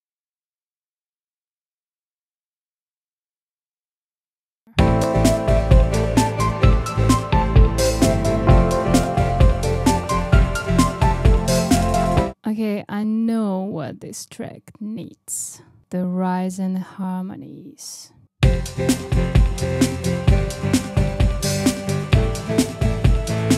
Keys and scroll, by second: 2.3 super+d, 3.0 super+d, 3.8 super+d, 4.7 space.